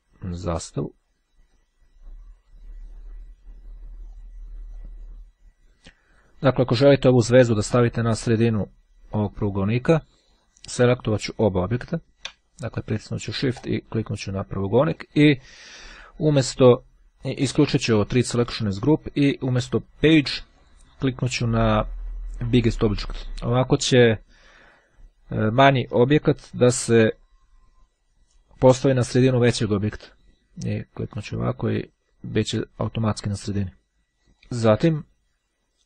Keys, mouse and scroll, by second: 0.4-2.1 drag, 2.5 click, 4.2-6.7 drag, 13.7 shift+click, 18.1-19.5 drag, 20.6 click, 22.7-23.8 drag, 30.7-31.8 drag, 34.2 Delete, 34.4 click.